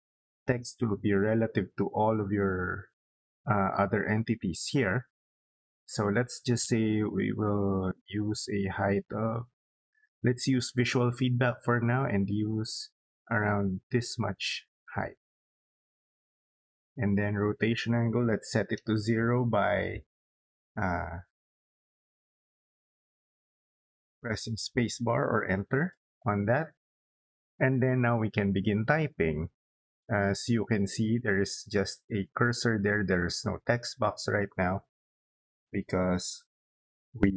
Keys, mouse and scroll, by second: 13.2 click, 25.5 Return.